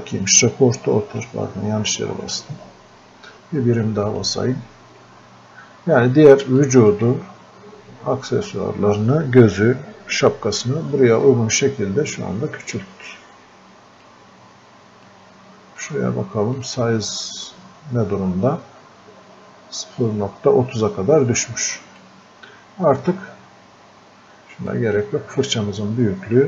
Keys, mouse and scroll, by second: 1.5-1.8 scroll up 1, 4.0 scroll down 1, 4.1 click, 7.4-7.7 scroll up 1, 7.7 scroll down 1, 11.3-16.6 drag, 21.7 click, 24.7 click.